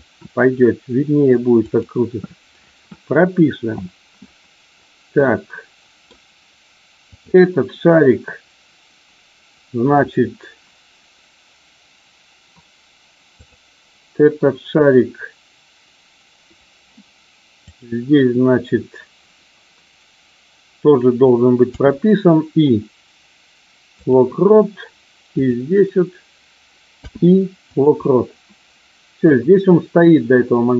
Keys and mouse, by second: 1.6 click, 5.1-6.1 middle drag, 17.6 click, 25.3 click, 29.3-30.7 drag.